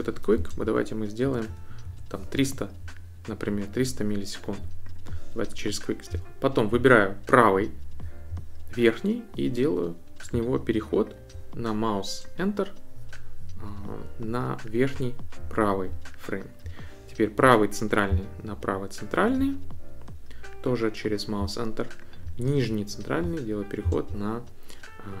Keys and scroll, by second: 0.3 Left, 0.6 Right, 1.3 BackSpace, 1.5 3, 1.8 Return.